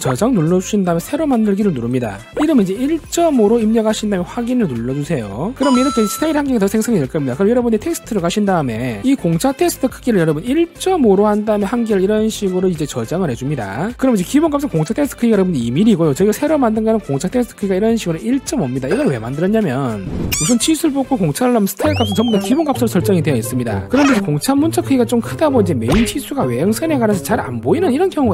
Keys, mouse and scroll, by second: 0.9 click, 2.0 click, 3.1 1, 3.8 5, 5.3 click, 8.7 click, 10.4 click, 10.9 1, 12.0 5, 12.5 click, 13.8 click, 15.0 click, 17.3 click.